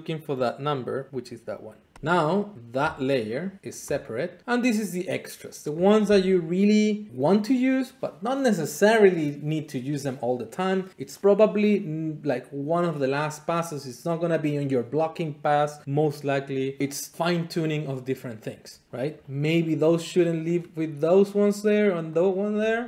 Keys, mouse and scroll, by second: 2.9 click, 3.6 middle click, 3.9 click, 4.5 middle click, 5.5-19.1 middle drag, 19.1-20.7 right drag, 20.7 middle click, 21.3-22.8 drag.